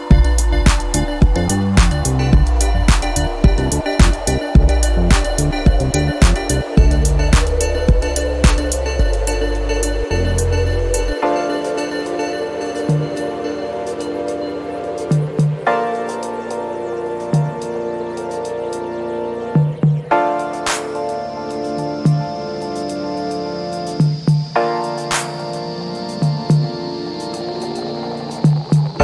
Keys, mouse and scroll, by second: 0.9 click, 4.0 click, 5.5 click, 6.7 click, 7.3 click, 8.7 -, 11.0 click, 12.3 BackSpace, 12.9 9, 20.6 Right, 21.8 BackSpace, 22.2 2, 22.5 5, 24.2 click, 25.0-27.2 drag, 28.5 click.